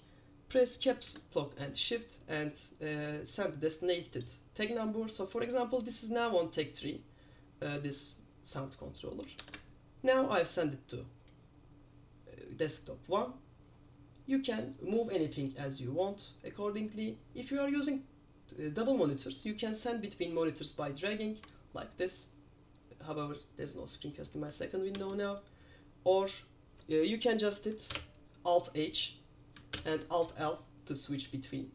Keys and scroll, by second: 9.5 super+!, 25.1 shift+super+space, 28.0 alt+h, 29.9 alt+l.